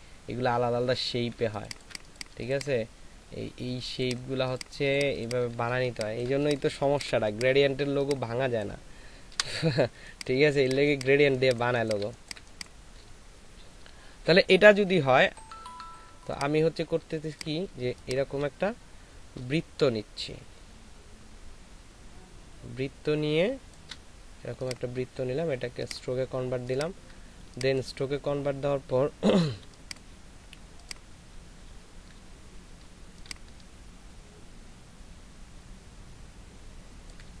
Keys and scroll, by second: 1.4 ctrl+alt+space, 5.5 shift+space, 6.8 c, 9.3 Delete, 9.9 space, 11.1 c, 12.0 c, 18.5 shift+space, 27.4 ctrl+space, 31.6 alt+shift+space.